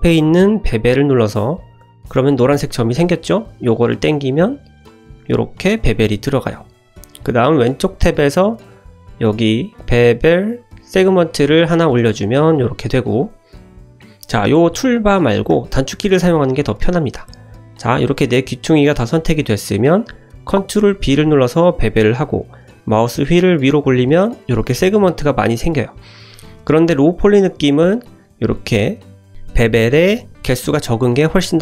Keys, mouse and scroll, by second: 0.7 click, 2.9-5.6 drag, 7.6 click, 11.6 click, 15.5 Tab, 16.1 ctrl+z, 17.9 click, 20.9 ctrl+b.